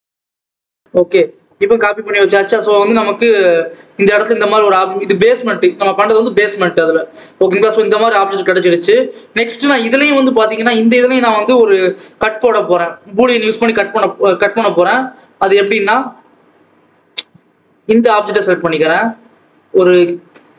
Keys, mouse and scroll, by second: 0.5 Tab, 0.7 alt+a, 2.1 click, 4.2 scroll up 2, 4.4 ctrl+s, 4.7-6.5 scroll up 1, 6.5 scroll up 2, 6.7 scroll down 1, 7.3 scroll up 1, 8.7 click, 9.6-9.9 scroll up 1, 9.9 click, 11.8 ctrl+s, 12.1-12.6 scroll down 1, 12.7-13.9 scroll up 1, 13.9 click, 14.7 shift+a, 17.9 click, 18.8 shift+a.